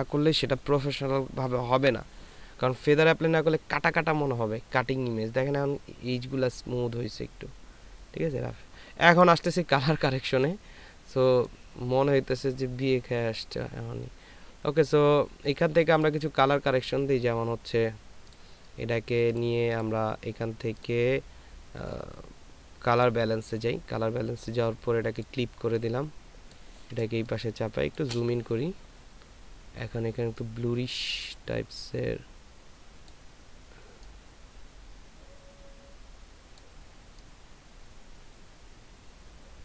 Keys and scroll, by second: 27.5 ctrl+space.